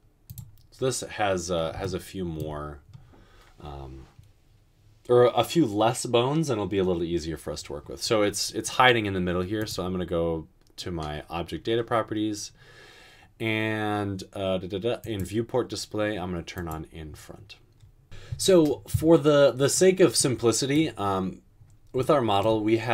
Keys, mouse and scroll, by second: 18.0 ctrl+z.